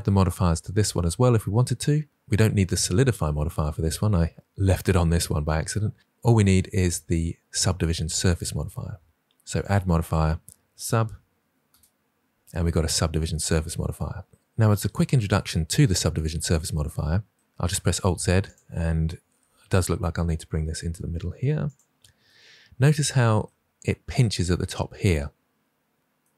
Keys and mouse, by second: 9.6 click, 15.2 Tab, 17.8 alt+z, 19.3 g, 19.7 x, 21.6 click.